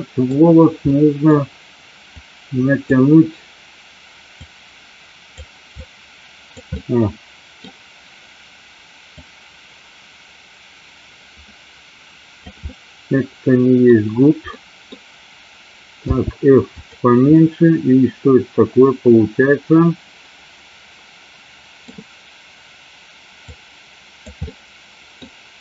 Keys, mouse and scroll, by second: 0.9 middle click, 2.2 click, 4.6 click, 5.9 click, 6.8 middle click, 9.2-12.4 drag, 12.8-13.9 middle drag, 14.6 middle click, 16.2 f, 17.4-21.9 middle drag, 23.5 click, 24.4 middle click.